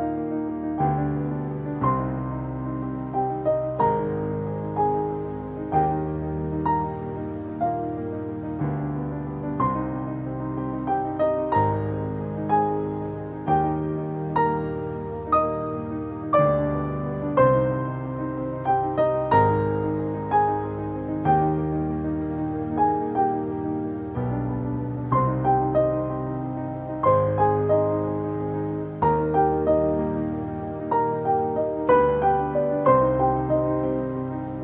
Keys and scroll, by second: 9.3 ctrl+t.